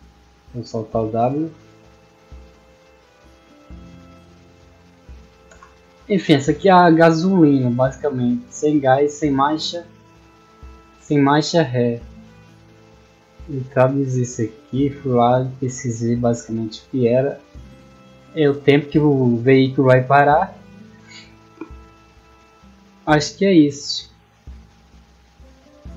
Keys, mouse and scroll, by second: 2.3 space, 8.3 middle click, 9.2-11.0 middle drag, 11.8 middle click, 13.4 middle click, 15.1 middle click, 17.6 middle click, 21.7 middle click, 24.5 click, 25.2 click.